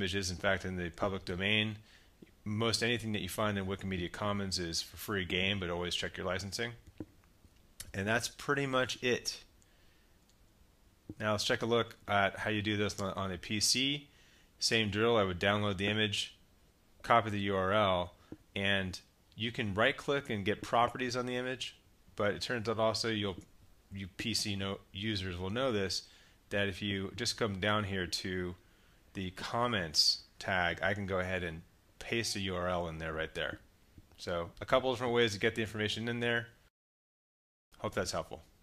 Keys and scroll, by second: 10.6 super+Tab.